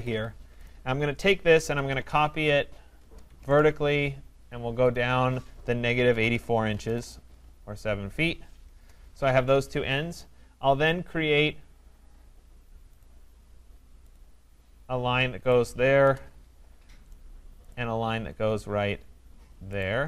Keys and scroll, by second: 3.0 Return, 9.3 Escape, 16.0 Return.